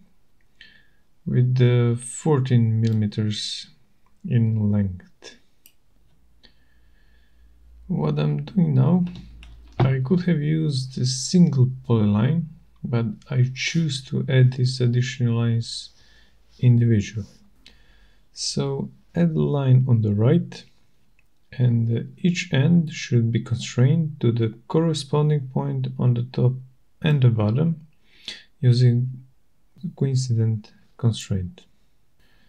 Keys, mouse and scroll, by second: 0.7 click, 2.1-3.0 typing, 3.2 Return, 4.5 typing, 6.4 click, 6.8-8.2 scroll, 9.1 click, 9.7 click, 11.0 click, 11.4 right click, 12.3 middle click, 12.5 middle click, 12.5 middle click, 12.8 middle click, 12.8 middle click, 13.0 scroll, 14.9 scroll, 20.0 scroll, 20.3 click, 21.2 click, 28.8 click, 31.5 click.